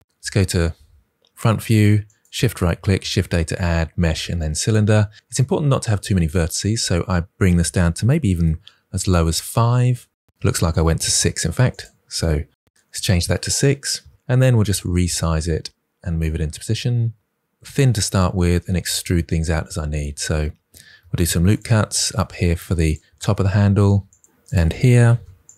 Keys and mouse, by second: 1.9 shift+right click, 2.7 shift+a, 6.2-8.2 drag, 12.1 click, 13.8 KP_1, 14.3 s, 15.7-17.2 typing, 18.8 s, 18.8 shift+z, 20.3 Tab, 20.9 ctrl+r, 21.3 click, 22.7 click, 23.1 ctrl+r, 23.9 click, 24.6 click, 24.9 ctrl+r, 25.1 click.